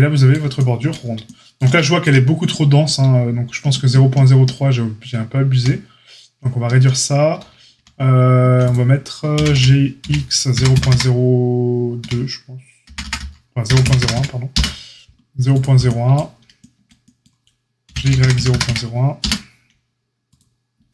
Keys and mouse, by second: 0.3-0.8 shift+middle drag, 5.4 ctrl+z, 7.7 ctrl+z, 9.3 g, 14.4-19.1 middle drag, 15.4 click, 17.8 g, 19.1-20.9 right drag, 20.2 click.